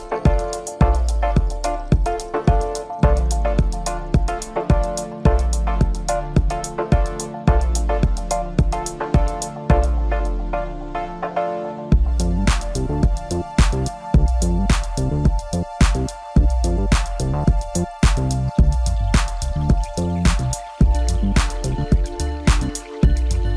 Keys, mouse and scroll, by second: 0.5 click, 2.2 click, 2.6 click, 3.3 click, 5.6 scroll up 2, 5.9-6.7 scroll down 1, 6.7-7.1 drag, 7.6 scroll up 2, 7.8 Tab, 8.2 middle click, 8.9 click, 9.4 shift+click, 9.7 middle click, 10.2 scroll down 3, 10.3 middle click, 10.6 shift+click, 11.1-11.7 scroll up 2, 11.7 middle click, 12.4 shift+click, 12.7 shift+click, 13.4 ctrl+z, 13.9 shift+click, 14.5 ctrl+KP_Add, 14.7 scroll down 3, 14.8 middle click, 15.4 scroll up 1, 16.2 click, 16.7 scroll down 1, 16.8 click, 17.0 scroll up 2, 17.1 scroll down 1, 17.1 middle click, 17.6-18.0 scroll up 2, 18.0 click, 18.2 scroll down 1, 18.3 middle click, 18.6 KP_1, 19.0 ctrl+KP_8, 19.4-19.8 scroll up 1, 19.8 ctrl+r, 21.0 scroll up 1, 21.1 scroll down 3, 21.2 middle click, 21.5-22.3 scroll up 2, 22.3 3, 22.5 middle click, 22.9 click.